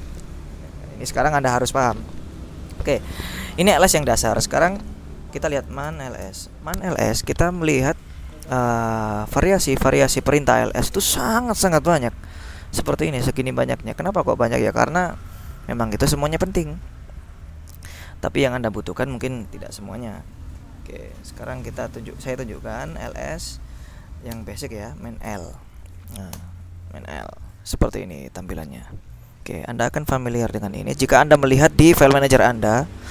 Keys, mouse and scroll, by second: 5.4-6.7 typing, 8.5 click, 10.3 click, 11.0-13.8 scroll down 5, 13.8-17.2 scroll up 3, 21.3 q, 23.0-25.5 typing, 26.5 Return, 28.2-29.2 drag, 29.7 click, 30.8 click, 30.9-31.4 scroll up 1, 31.7-32.5 scroll up 1.